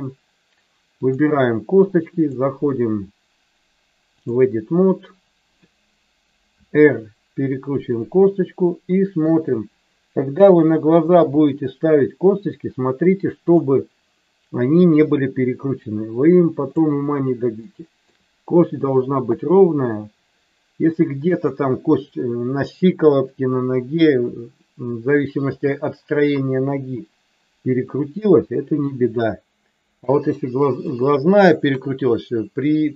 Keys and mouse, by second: 2.2-4.4 drag, 6.5 r, 7.9 click, 8.3 middle click, 11.1 KP_7, 13.5 click, 15.1-16.7 drag, 17.6 shift+middle click, 19.3-21.3 drag, 25.5 s, 27.9 click, 28.8-30.0 drag, 31.7 KP_1.